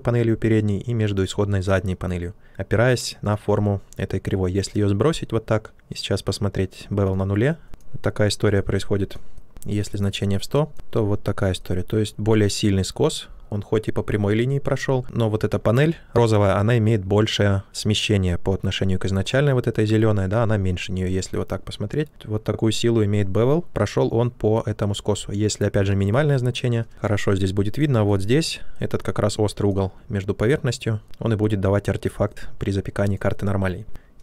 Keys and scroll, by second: 26.9 ctrl+z.